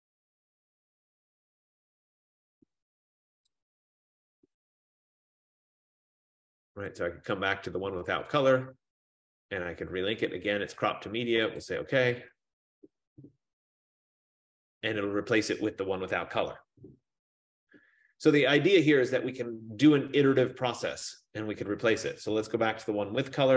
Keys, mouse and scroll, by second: 3.6 click, 4.0 click, 5.1 click, 5.3 click, 7.0 click, 8.5 click, 11.6 click.